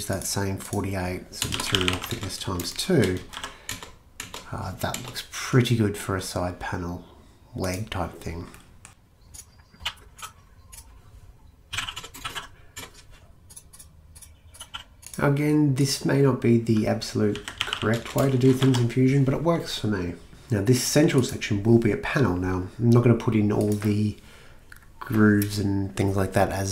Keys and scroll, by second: 0.8-3.3 typing, 3.7 Return, 4.2 Return, 4.9 Return, 7.7 typing, 9.9 typing, 11.5-12.8 typing, 14.7-15.6 typing, 17.1-19.1 typing.